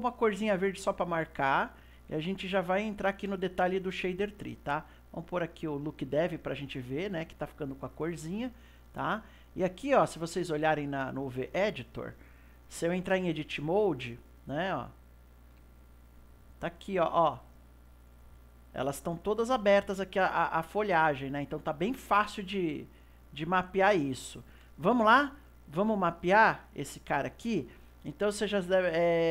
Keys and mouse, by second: 2.1-5.5 middle drag, 5.5 click, 9.8-11.9 drag, 11.9-13.1 ctrl+middle drag, 13.1 Tab, 15.1 click, 15.6 a, 17.0 click, 20.2-22.9 middle drag, 22.9-24.8 drag, 24.8-26.1 middle drag, 26.1-29.1 drag.